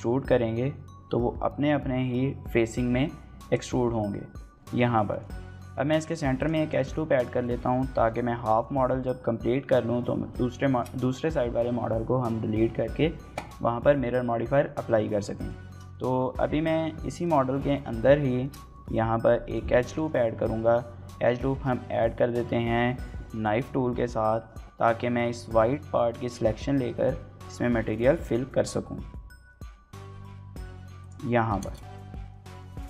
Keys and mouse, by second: 4.5 Tab, 5.1 shift+middle click, 5.3-5.6 middle drag, 5.6 Tab, 6.0 ctrl+r, 6.6 right click, 7.2 shift+middle click, 7.4 middle click, 10.6 shift+middle click, 15.1 shift+middle click, 15.4 middle click, 15.7 shift+middle click, 15.9 middle click, 16.1 Tab, 16.4 Tab, 17.0 shift+middle click, 17.2 middle click, 17.7 shift+middle click, 18.4 shift+middle click, 18.7 ctrl+r, 19.7 shift+middle click, 19.9 middle click, 20.4 KP_1, 21.5 shift+middle click, 32.3 middle click.